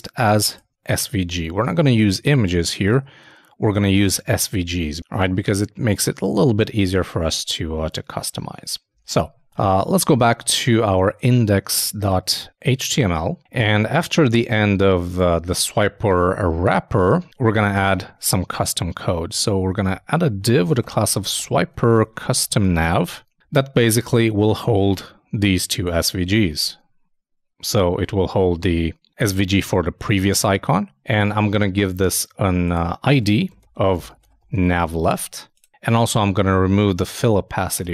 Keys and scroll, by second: 9.0 super+i, 9.6 super+Tab, 26.4 super+v, 36.9 shift+super+Left, 37.7 shift+super+BackSpace.